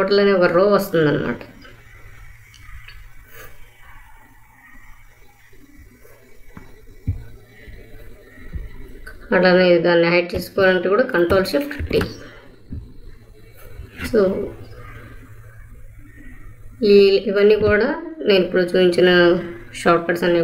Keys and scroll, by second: 11.7 ctrl+shift+t.